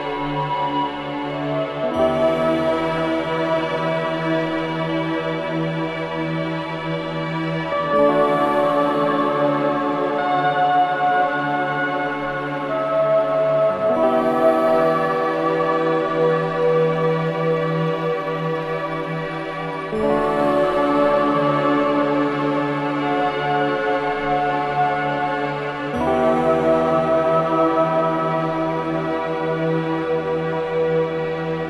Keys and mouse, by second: 0.5 click, 4.5 Left, 4.8 Left, 5.0 Left, 5.1 Left, 5.3 Left, 5.4 Left, 5.6 Left, 5.7 Left, 5.9 Left, 6.1 Left, 6.3 Left, 6.4 Left, 6.6-7.4 Left, 8.5-11.9 drag, 13.5 i, 15.5 click, 18.2-19.7 drag, 20.2-21.2 drag, 22.6 click, 22.8 typing, 25.2 typing, 26.2 ctrl+alt+click, 27.5-29.3 drag, 30.1 click, 31.1 typing.